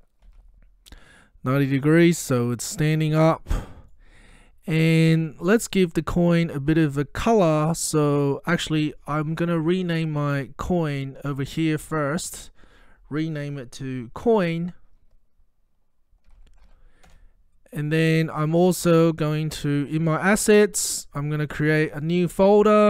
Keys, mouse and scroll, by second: 0.0-0.8 typing, 2.4-3.0 middle click, 3.1-4.0 scroll up 1, 4.0-4.9 middle drag, 8.2 click, 16.0-17.2 typing, 19.7 click, 22.0 right click.